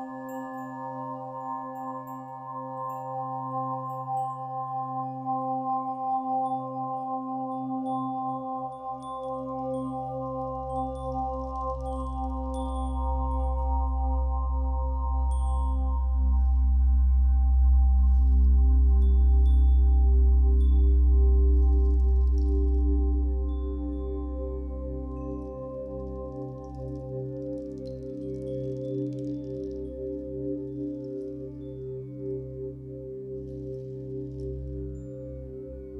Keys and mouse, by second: 1.2 Escape, 3.2 click, 3.9 a, 4.2 z, 6.8 click, 8.3 ctrl+l, 8.3 typing, 9.6 Return, 10.8-13.6 ctrl+alt+drag, 13.1-13.9 typing, 15.9 click, 17.0 click, 18.1 typing, 19.3 Escape, 19.8-20.8 drag, 20.6-21.2 typing, 21.8 Escape, 23.2-24.3 drag, 23.8-24.5 typing, 26.2 click, 27.1-27.7 typing, 27.9 Return, 28.9-29.7 drag, 29.5 Delete, 30.2-31.1 drag, 30.9-31.8 typing, 32.6 click, 32.9-33.6 typing, 33.1-35.9 drag.